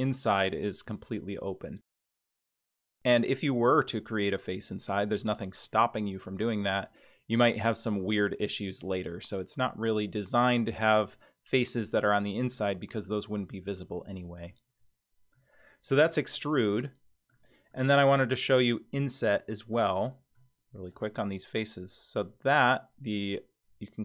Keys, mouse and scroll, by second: 1.7-2.4 middle drag, 2.7 scroll up 2, 9.8-11.0 middle drag, 12.6-13.1 middle drag, 13.6-14.4 scroll down 1, 14.4-15.3 middle drag, 14.4-14.9 scroll down 2, 16.3-17.4 middle drag, 17.7-20.5 middle drag, 20.9 click.